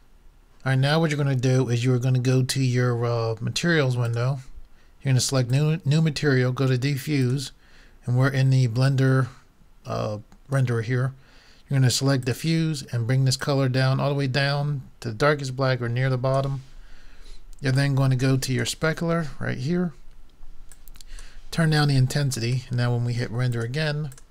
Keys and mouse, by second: 4.0-9.1 drag, 12.3-14.1 drag, 17.7-19.6 drag, 20.7-24.3 drag.